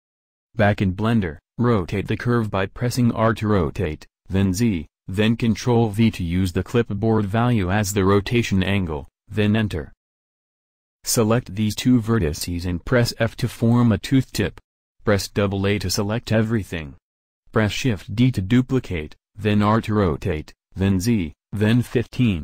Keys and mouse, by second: 1.1 r, 12.8 f, 14.1 a, 14.3 a, 15.0 shift+d.